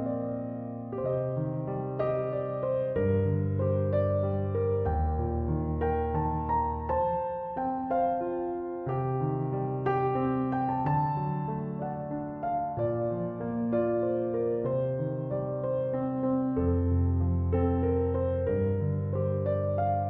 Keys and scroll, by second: 13.4-14.6 typing, 14.7 Return.